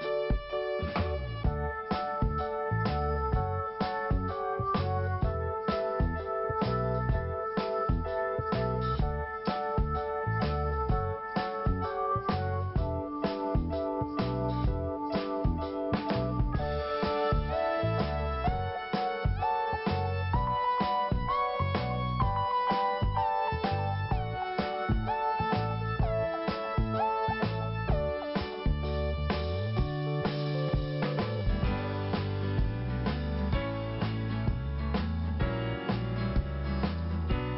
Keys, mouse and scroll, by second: 1.4 click, 1.5 click, 2.0 click, 3.3 click, 4.4 click, 5.5 scroll down 1, 6.3 click, 10.3 click, 11.6 click, 19.3 click, 22.2 t, 23.7 scroll up 1, 24.9 click, 25.9 scroll up 1, 26.4 click, 27.9 click, 30.8-31.3 scroll down 1, 31.3 click, 32.2 click, 33.7 scroll down 1, 34.3-34.8 scroll up 1, 35.6 click, 37.0 click.